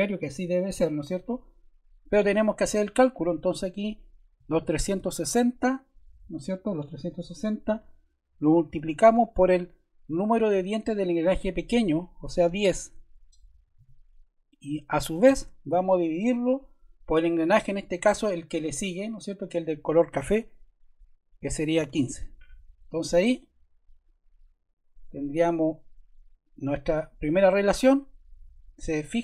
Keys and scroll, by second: 4.0-5.4 typing, 13.6 1, 21.3-22.2 typing.